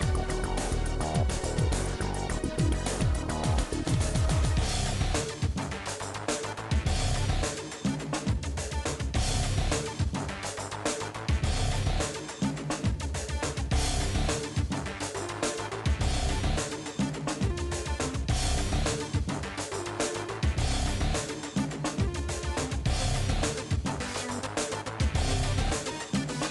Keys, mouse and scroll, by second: 0.0 ctrl+z, 0.4 shift+click, 0.9 middle click, 1.3 shift+click, 1.8 middle click, 2.0 shift+click, 2.5-3.8 middle drag, 3.8 s, 5.1 middle click, 5.9 click, 6.1 middle click, 7.0 click, 7.3 scroll up 1, 7.4 shift+middle click, 8.0 click, 8.2 KP_1, 8.4 KP_3, 8.7 1, 9.1 click, 9.6 g, 10.6 click, 11.6 s, 13.2-17.6 shift+middle drag, 17.6 ctrl+z, 17.7 ctrl+z, 18.0 middle click, 18.3-18.9 ctrl+shift+z, 19.0 middle click, 19.7 click, 20.3 Delete, 21.0 middle click, 21.9 click, 22.0 Delete, 22.3 middle click, 22.7 scroll down 1, 23.0 click, 23.2 Delete, 23.7 shift+click, 24.4-26.5 middle drag.